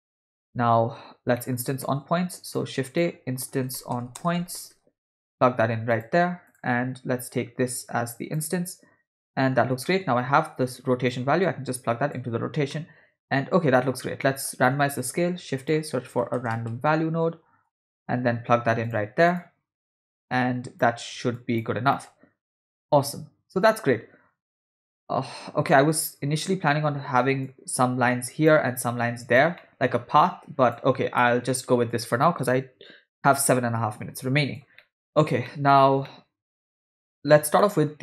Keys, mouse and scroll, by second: 1.4 middle click, 1.8 shift+a, 7.4-8.4 drag, 9.2 ctrl+middle click, 9.9 middle click, 11.2-12.3 drag, 12.7-13.8 middle drag, 14.2 middle click, 14.8 shift+a, 17.8 BackSpace, 20.0-20.9 drag, 21.4 click, 22.0 middle click, 22.1-22.7 scroll down 1, 22.7 scroll up 1, 22.7-26.5 middle drag, 27.5-28.6 drag, 29.1 click, 29.6 middle click, 30.2 click, 31.2 middle click, 31.9-34.7 ctrl+drag, 34.8 middle click, 35.4 ctrl+middle click, 36.1 middle click, 37.6 middle click.